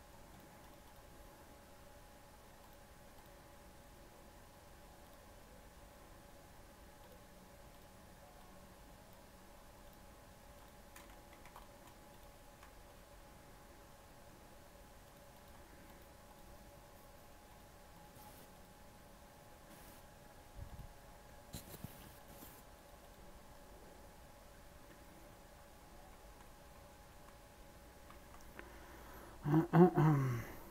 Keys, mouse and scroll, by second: 0.3-12.3 drag, 12.3 middle click, 12.7 scroll down 2, 12.9-15.0 middle drag, 15.0 click, 15.3 click, 17.9-24.6 drag, 24.6 scroll up 1, 25.0 middle click, 25.1 z, 25.8 scroll down 4, 26.0-27.0 middle drag, 27.0 shift+a, 28.0 shift+a.